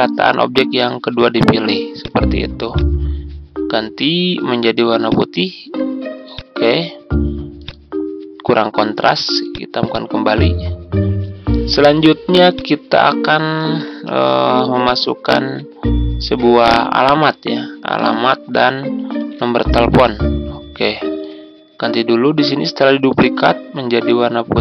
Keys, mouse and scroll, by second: 0.7-1.1 typing, 1.9-6.1 drag, 10.3-12.5 scroll up 1, 12.5 click, 14.0 ctrl+d, 14.8-16.9 drag, 19.2 ctrl+d, 19.9-21.1 drag, 22.1-24.1 drag.